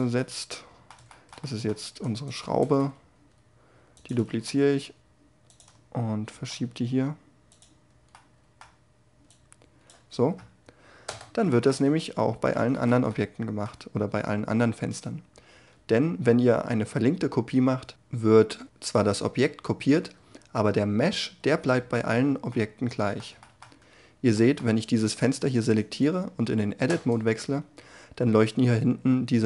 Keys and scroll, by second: 1.4 g, 2.6 shift+d, 10.6 Tab, 19.7 Tab, 21.5 a, 24.6 Tab.